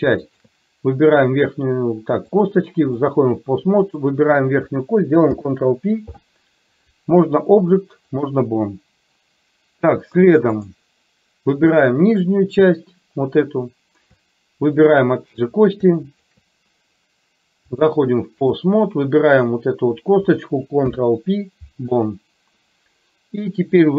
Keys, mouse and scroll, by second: 0.3 shift+click, 2.6 click, 3.9 click, 5.3 ctrl+p, 10.2 click, 11.7 click, 14.8 shift+click, 16.3 shift+click, 17.8 click, 19.3 click, 20.8 ctrl+p.